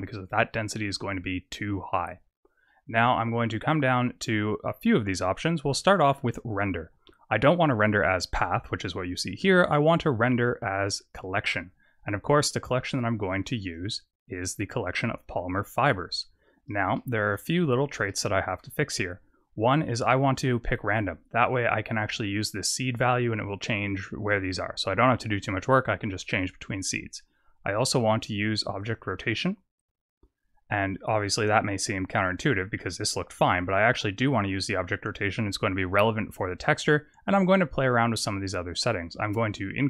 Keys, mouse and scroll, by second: 2.8-3.9 scroll down 1, 6.2 click, 9.7 click, 10.1 click, 11.5-13.2 scroll down 1, 13.2 scroll down 4, 13.5 click, 16.3 scroll up 2, 16.9 shift+middle click, 17.4-17.9 scroll up 2, 18.0 shift+middle click, 18.7-19.4 scroll down 2, 20.7 click, 21.4-22.5 scroll up 4, 22.5 click, 22.9 click, 24.4 click, 24.9 click, 25.4-28.0 scroll down 1, 28.0-28.6 scroll down 4, 28.7 click, 32.1 click, 34.2 click, 39.2 click.